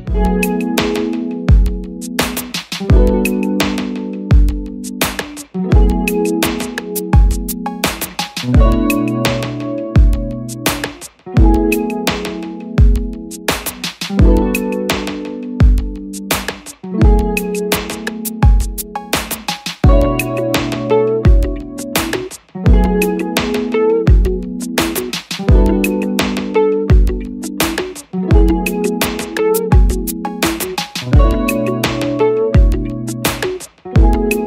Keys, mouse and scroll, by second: 4.7 double click, 9.1 Return.